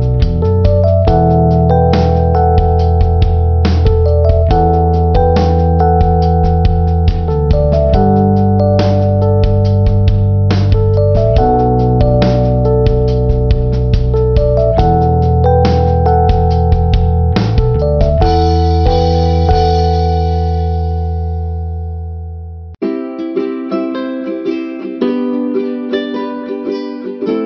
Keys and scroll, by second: 20.7 ctrl+t.